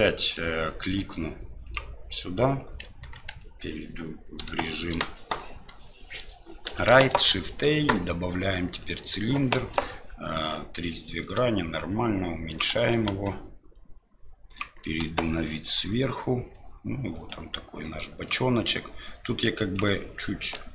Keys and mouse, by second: 0.0 shift+middle drag, 2.8 KP_1, 3.4 KP_3, 4.6 shift+middle drag, 7.1 shift+a, 11.2 s, 12.9 s, 15.0 KP_7, 16.6 click, 17.8 click, 18.9 click, 20.5 KP_1.